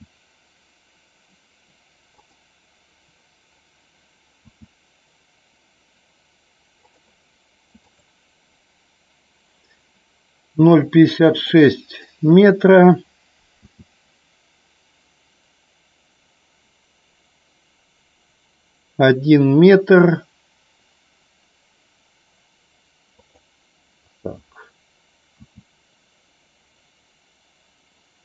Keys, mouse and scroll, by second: 2.3 click, 4.4 s, 6.9 click, 7.9 click, 10.6-11.5 drag, 13.5 s, 23.2 click.